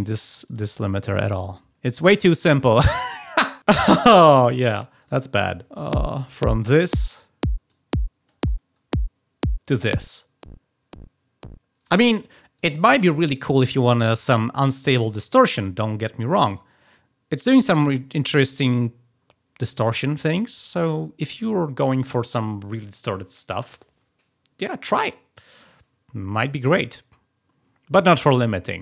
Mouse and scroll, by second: 0.1 click, 0.4 click, 4.4 click, 4.9 click, 7.6 click, 9.9 click, 12.5 click.